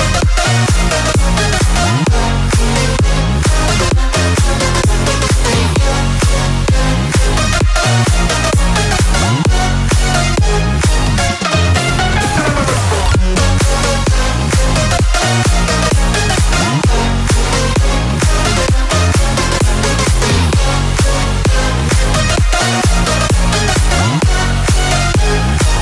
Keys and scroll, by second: 0.4 space, 7.9 space, 12.2 space, 14.0 ctrl+space, 14.2 ctrl+z, 22.9 space.